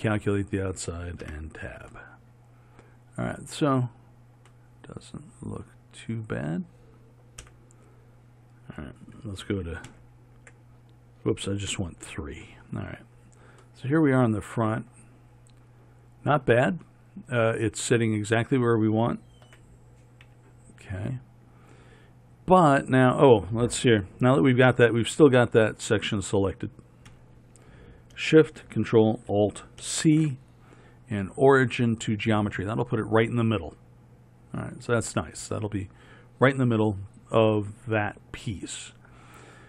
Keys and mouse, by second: 1.3 Tab, 7.5 KP_1, 10.0 ctrl+KP_3, 11.8 KP_3, 19.5 z, 25.0-27.2 drag, 27.2 KP_3, 29.9 ctrl+alt+shift+c.